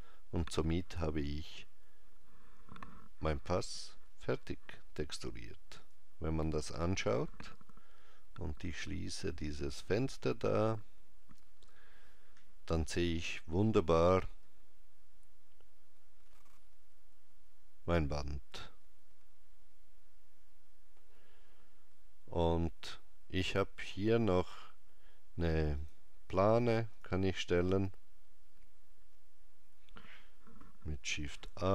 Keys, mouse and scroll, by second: 5.9 click, 9.8 click, 25.8 click, 31.5 shift+a.